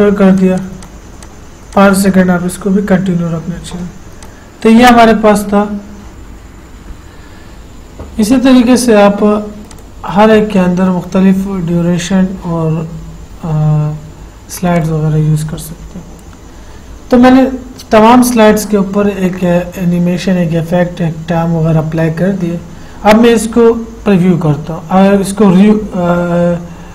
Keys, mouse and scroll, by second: 4.4 click, 10.0 click, 10.0 click, 15.0 click.